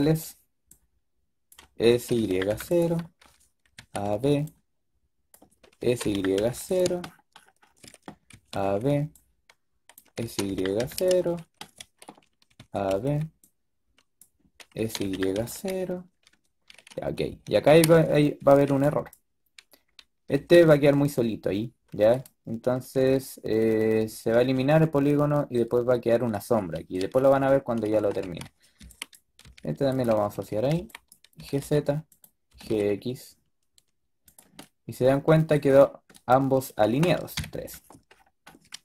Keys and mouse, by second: 1.8 s, 3.6 a, 3.9 b, 5.7 s, 8.2 a, 8.5 b, 10.1 s, 12.4 a, 12.8 b, 14.7 s, 17.5 a, 17.8 a, 18.1 a, 18.6 b, 20.3 g, 27.1 click, 27.9-31.3 typing, 32.4 g, 37.2 KP_3.